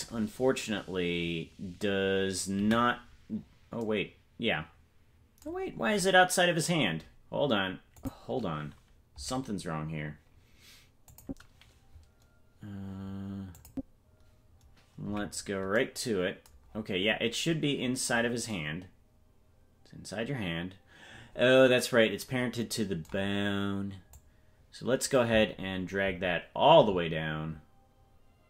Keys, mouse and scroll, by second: 2.5 KP_Decimal, 3.5-4.0 scroll down 4, 5.8-6.8 scroll down 7, 8.0 click, 11.0 click, 13.5 click, 15.1 KP_Decimal, 17.0-17.4 scroll down 11, 17.9-18.3 scroll down 8, 24.1-28.4 drag.